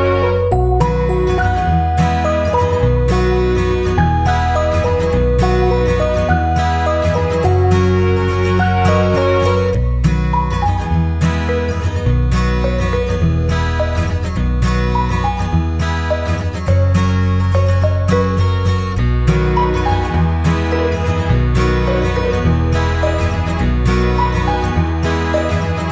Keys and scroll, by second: 5.3 ctrl+0, 9.7 ctrl+], 15.7 ctrl+=.